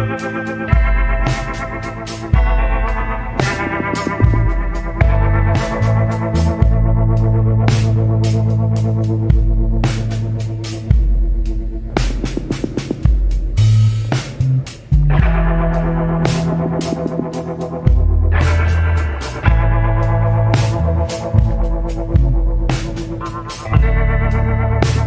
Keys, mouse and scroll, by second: 21.1 scroll down 1, 21.9 scroll up 1.